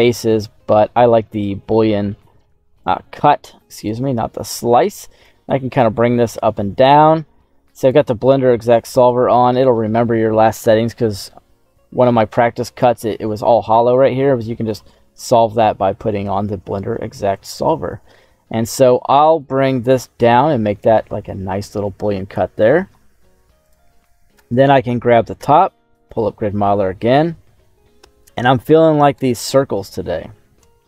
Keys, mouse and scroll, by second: 2.7-3.8 drag, 5.2-6.9 drag, 7.8 click, 8.9 click, 10.4 middle click, 14.6 click, 16.5-16.9 scroll down 2, 17.3-20.9 drag, 24.1 middle click, 24.4 right click, 25.3 q, 27.2-29.5 middle drag, 27.9 KP_7, 28.3 scroll up 2, 29.5-30.8 right drag.